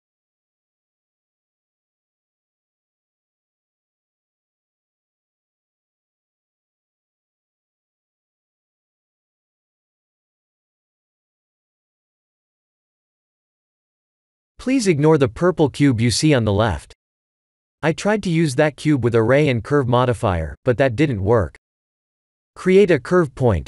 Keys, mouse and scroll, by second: 1.7 click, 2.0 Tab, 2.5 ctrl+r, 3.7 Tab, 4.0 middle click, 4.7-5.0 scroll down 5, 5.0 middle click, 6.6 click, 7.1 right click, 7.9 click, 8.3 click, 8.6 right click, 9.1 click, 9.5 scroll down 4, 10.7 scroll down 5, 11.4 shift+middle click, 11.9 middle click, 14.2 KP_1, 16.0 scroll up 2, 17.0 click, 17.0 middle click, 17.6 KP_1, 18.3 click, 18.8 shift+a.